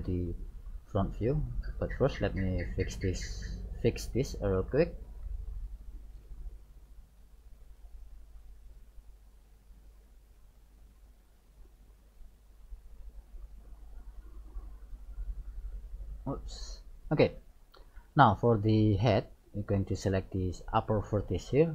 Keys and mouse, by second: 2.0-3.7 drag, 4.7-6.3 middle drag, 6.3-8.0 drag, 8.0 right click, 9.7-11.7 drag, 11.7 right click, 12.2 middle click, 12.3-14.0 drag, 12.3 right click, 14.3 right click, 14.8 click, 16.4-17.4 drag, 17.5-19.2 middle drag, 20.0 right click, 20.9 middle click.